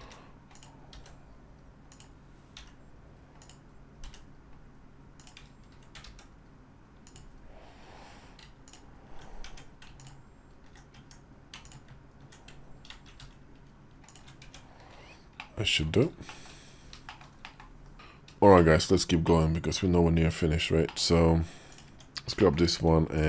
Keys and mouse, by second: 0.7 s, 2.4 i, 3.9 e, 5.8 s, 9.2 Tab, 9.7 alt+click, 10.7 Tab, 11.5 alt+click, 12.9 ctrl+b, 14.2 Tab, 15.1 middle click, 16.1 shift+middle click, 16.8 shift+middle click, 17.2 middle click, 17.6 KP_5, 18.4 shift+middle click, 19.1 middle click, 20.7 middle click, 21.6 click, 21.8 Tab, 22.2 shift+click.